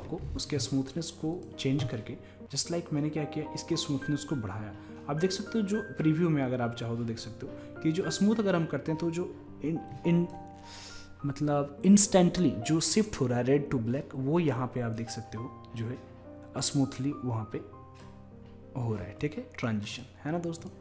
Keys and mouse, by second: 1.4-4.6 drag, 15.0-20.8 drag.